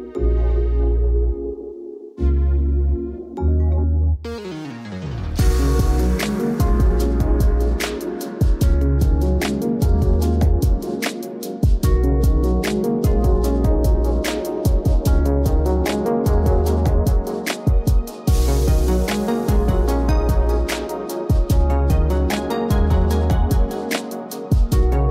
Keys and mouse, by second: 0.4 click, 2.3 space, 2.7 click, 3.2 KP_0, 4.0 g, 5.0 g, 7.6 click, 7.9 click, 8.4 alt+shift+z, 9.4 click, 9.9 alt+shift+z, 10.2 ctrl+s, 11.8 click, 12.2 KP_0, 13.7 alt+shift+z, 13.8 alt+shift+z, 16.6 shift+click, 18.5 z, 19.0 KP_0, 19.2 alt+shift+z, 19.7 click, 19.9 shift+d, 21.4 click, 22.0 g, 22.2 click, 22.5 g, 22.9 click, 23.1 KP_0, 23.4 z, 24.1 alt+shift+z.